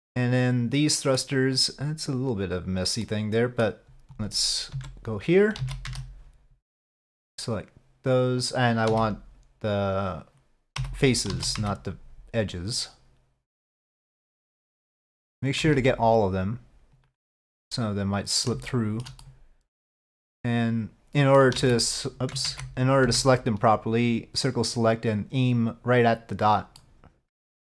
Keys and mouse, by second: 3.1 middle click, 4.2 click, 4.8 Tab, 5.7 alt+a, 6.0 c, 11.4 alt+a, 11.7 c, 14.9 middle click, 17.5-18.6 middle drag, 18.8 shift+middle click, 19.3-21.5 middle drag, 21.7 alt+a, 22.6 ctrl+z, 23.1 c, 26.9 middle click.